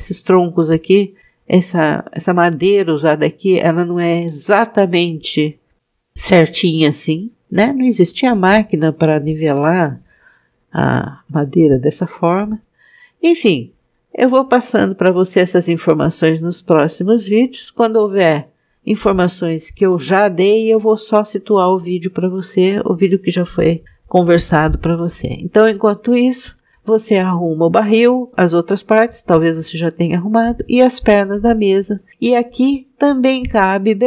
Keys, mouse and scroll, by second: 6.9-7.8 scroll down 1, 7.8-9.9 scroll down 1, 14.0-16.3 scroll down 2, 32.3-32.9 scroll up 3.